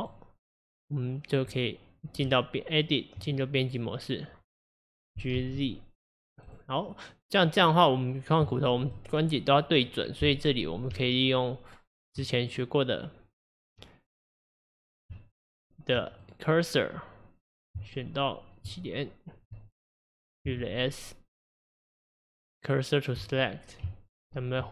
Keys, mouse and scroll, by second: 0.0 click, 1.5 click, 2.3 Tab, 5.2 g, 8.5-11.0 shift+middle drag, 11.0 Tab, 12.5 click, 14.5 click, 15.2 Tab, 16.2 click, 17.8 Tab, 20.6 shift+s, 23.9 Tab.